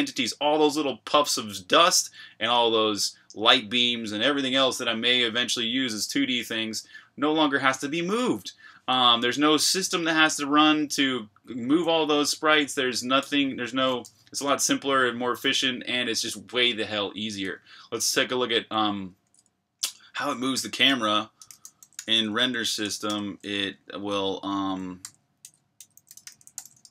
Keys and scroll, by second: 10.8-13.6 typing, 14.0 Escape, 17.9 j, 19.2 k, 20.3-23.3 typing, 24.8-26.9 typing.